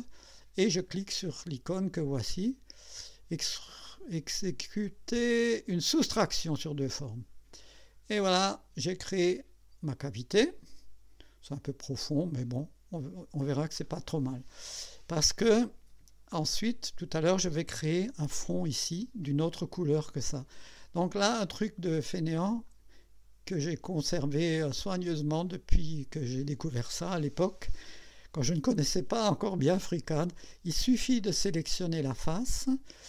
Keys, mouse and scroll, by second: 6.9 click, 8.2-14.3 drag, 16.3-17.2 drag, 22.7 click, 23.5 click, 24.4 scroll up 1, 24.9 right click, 31.2 click.